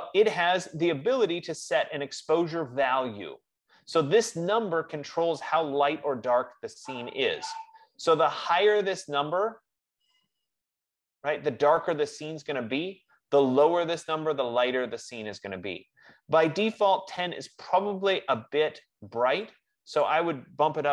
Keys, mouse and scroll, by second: 6.4 F15, 20.4-20.9 drag.